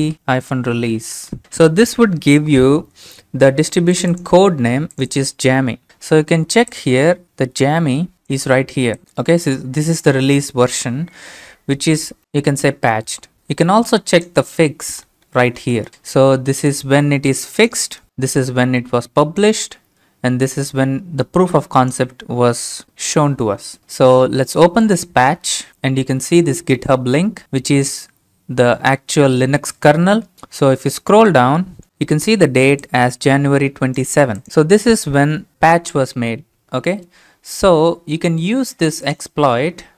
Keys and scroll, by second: 0.0-1.9 typing.